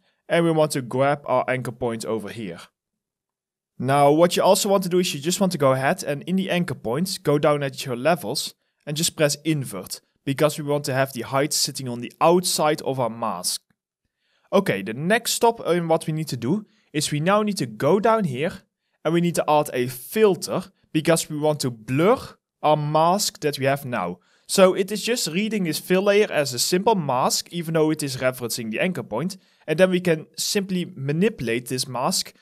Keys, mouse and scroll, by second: 9.8 alt+middle click, 10.2 alt+right click, 10.8 alt+click, 13.1 alt+middle click, 13.5 alt+click.